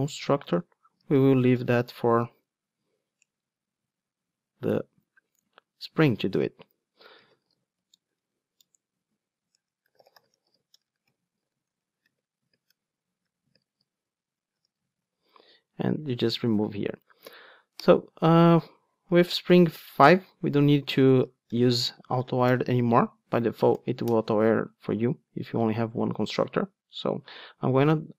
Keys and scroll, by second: 1.0 Tab, 1.5 super+n, 6.8 Return, 14.9 alt+super+l, 16.1 super+x, 19.1 alt+Return, 21.3 Tab, 22.5 Return.